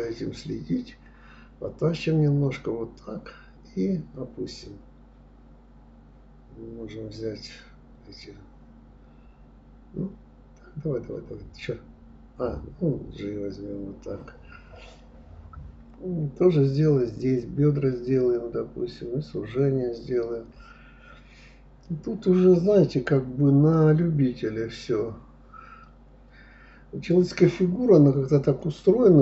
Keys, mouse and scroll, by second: 0.2 g, 3.5-4.3 middle drag, 4.3 click, 5.7 click, 6.2 click, 6.6 shift+click, 6.9 shift+click, 7.2-8.7 middle drag, 9.4 r, 12.4-13.9 middle drag, 14.1 click, 14.6 shift+click, 15.2-16.1 middle drag, 16.1 g, 17.1-18.3 middle drag, 18.3 click, 18.7 click, 19.2 click, 19.6-20.2 middle drag, 20.2 g, 21.8-23.3 middle drag, 24.8-25.1 scroll up 2, 25.4 click, 25.8 shift+click, 26.4 click, 26.9 shift+click, 27.2 shift+drag, 27.5-28.1 middle drag, 28.1-29.2 scroll down 1.